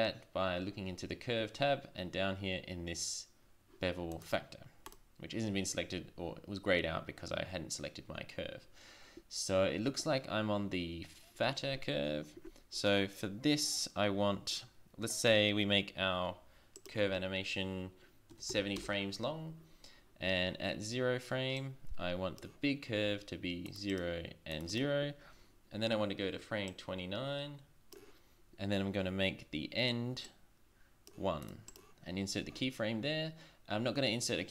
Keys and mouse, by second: 5.6-6.9 drag, 16.8 click, 23.5 click, 26.5 click, 26.8-28.9 drag, 30.3-33.3 drag.